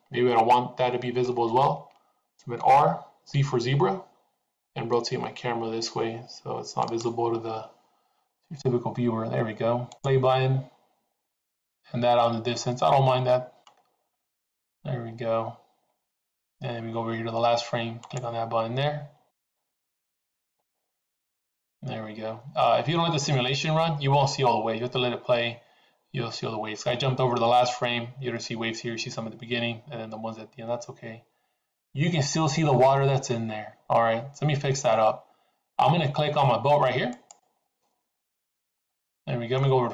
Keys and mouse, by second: 2.6 r, 9.8 click, 18.0-19.0 drag, 19.4 click, 20.5 click, 37.0-38.2 drag, 38.8 middle click.